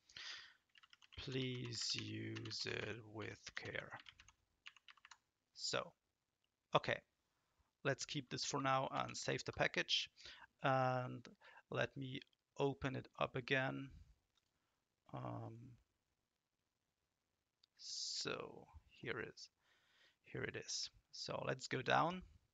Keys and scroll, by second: 0.5-5.5 typing, 8.9 ctrl+s.